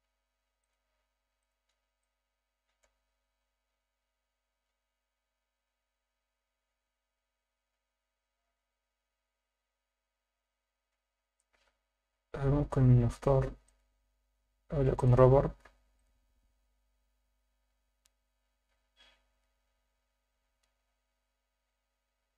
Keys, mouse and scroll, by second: 0.6-1.5 drag, 2.1-3.0 alt+middle drag, 11.1 Escape, 12.1-12.6 scroll up 4, 12.9 scroll up 3, 13.6-15.1 drag, 15.9 click.